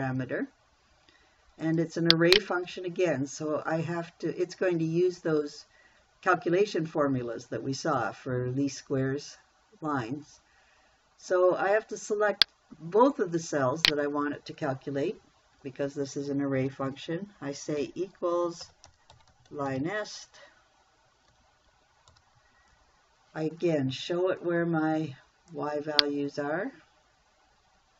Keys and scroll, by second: 18.3-20.6 typing, 22.5 shift+9.